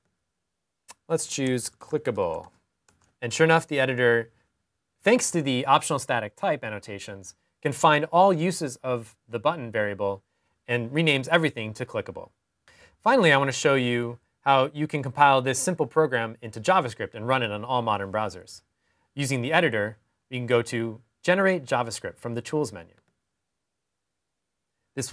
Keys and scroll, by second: 0.8 typing.